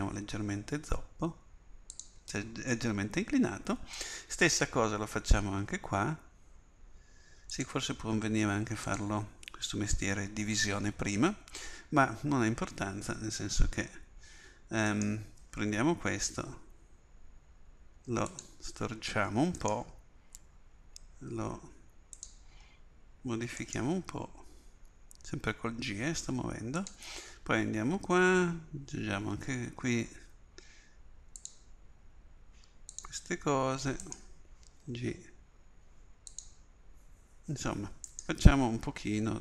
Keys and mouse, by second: 4.9 ctrl+r, 14.9-18.3 drag, 16.2 g, 19.6-22.2 drag, 20.4 g, 23.7-26.8 drag, 24.9 g, 28.2 ctrl+r, 34.1-36.4 drag, 34.9 g, 38.1-39.4 drag, 38.8 g.